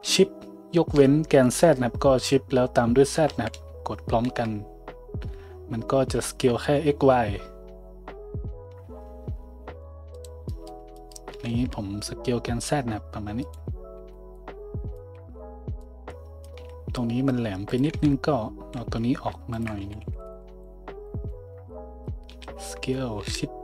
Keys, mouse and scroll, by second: 10.3-17.7 middle drag, 11.3 s, 14.0 Tab, 15.2 Tab, 16.6 a, 17.7 click, 17.8-19.5 middle drag, 17.9 `, 19.5 shift+click, 19.6-20.8 shift+middle drag, 19.8-22.3 typing.